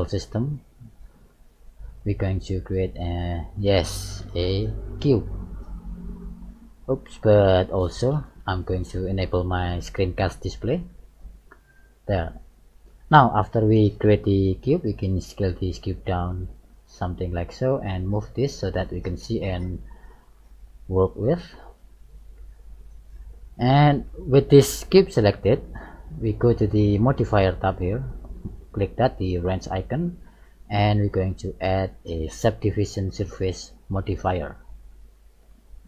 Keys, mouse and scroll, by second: 10.8 shift+middle click, 12.1 middle click, 13.2 middle click, 14.9 s, 16.8 middle click, 18.0 click, 19.7 click, 20.9-22.0 scroll up 7, 22.0 middle click, 23.7 shift+middle click, 24.8-25.1 scroll up 1, 30.6 click, 34.3 middle click.